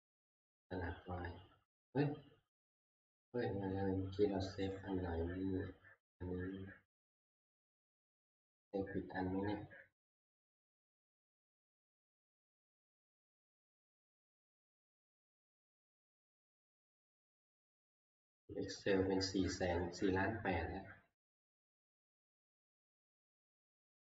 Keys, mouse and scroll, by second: 0.0 ctrl+s, 0.0 click, 0.0 ctrl+scroll, 0.1 click, 3.5-5.2 drag, 5.3-9.2 right drag, 10.7 right click, 14.3 click.